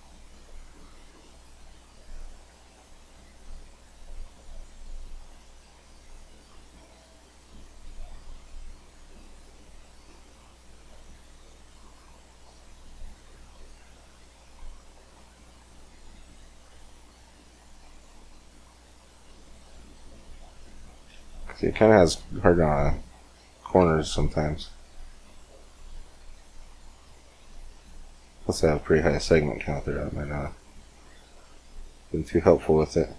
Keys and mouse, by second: 1.1-3.5 middle drag, 3.5-12.7 drag, 12.7 middle click, 12.9-15.7 drag, 15.7-19.9 middle drag, 21.2-22.8 middle drag, 23.7 Tab, 25.0 Tab, 26.1-28.2 drag, 29.0-32.0 drag, 32.4-33.1 drag.